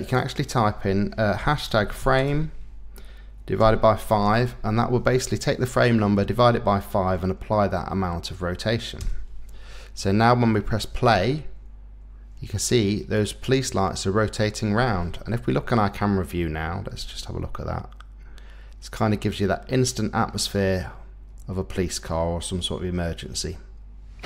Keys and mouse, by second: 0.0-9.0 drag, 10.9 space, 14.7 space, 15.3 KP_0, 17.0 space.